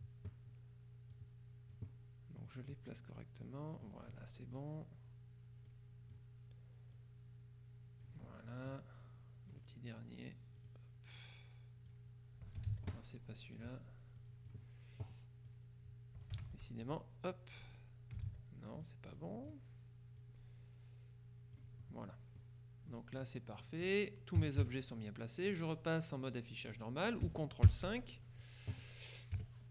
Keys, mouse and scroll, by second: 1.2 click, 2.6-4.4 drag, 4.2 middle click, 5.7 click, 7.0-8.6 drag, 9.6 click, 10.7 click, 12.0 click, 12.8 ctrl+z, 14.3-15.1 drag, 15.5 click, 16.5 ctrl+z, 16.9 ctrl+click, 17.7-18.7 drag, 18.3 ctrl+z, 18.8 ctrl+click, 20.3-22.1 drag, 22.9-24.5 drag, 24.5 KP_Subtract, 27.7 ctrl+KP_5, 29.4 KP_Subtract.